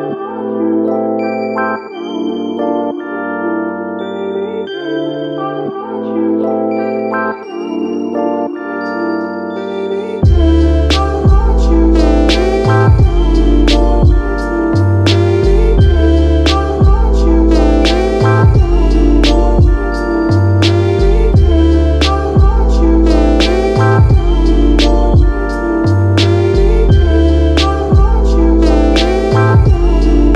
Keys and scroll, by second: 0.0-0.1 typing, 3.1-3.9 typing, 29.4 i.